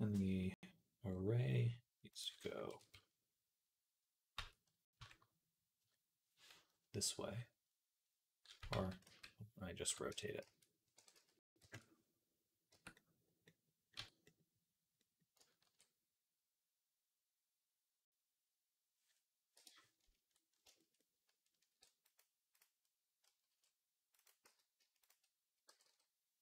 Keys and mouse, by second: 1.9-10.8 drag, 1.9-10.8 middle drag, 8.6 ctrl+z, 8.9 ctrl+z, 9.9 Tab, 10.3 a, 10.8 r, 12.5 Tab, 13.8 Tab, 15.5 ctrl+r, 21.5 ctrl+r, 22.5 click, 22.7 right click, 23.1-24.1 ctrl+drag, 23.3 ctrl+r, 24.1 middle click, 24.3 z, 24.8 shift+click, 24.9-26.4 shift+middle drag, 25.5 g.